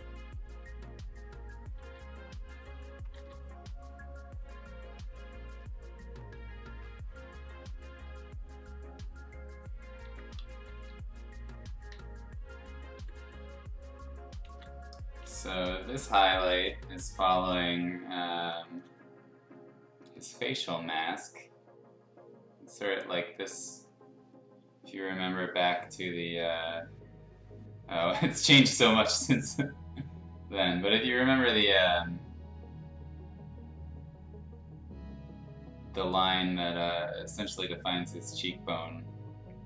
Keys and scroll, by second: 1.8 ctrl+z, 3.1 ctrl+z, 10.5 ], 10.8 ], 11.8 [, 12.9 x, 14.4 ctrl+z, 15.2 x, 17.3 ctrl+z, 18.7 ctrl+z.